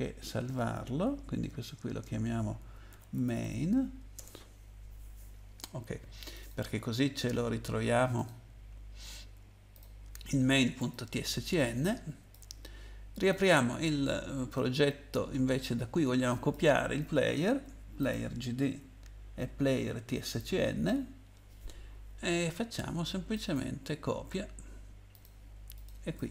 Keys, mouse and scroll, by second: 1.3 ctrl+s, 2.6-3.9 typing, 4.1 Return, 6.3 click, 8.2 click, 10.8 click, 11.4 click, 13.3 click, 13.4 click, 14.5 click, 15.6 click, 18.0 click, 20.3 ctrl+click, 23.3 right click, 25.1 click, 25.7 click, 26.1 right click.